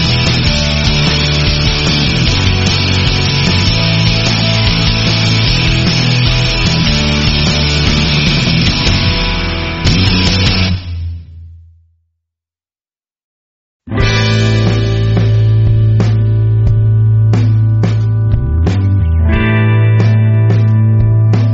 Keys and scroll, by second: 3.2 space, 3.7 alt+super+space, 3.8-4.6 alt+super+space, 6.1 space, 6.6 space.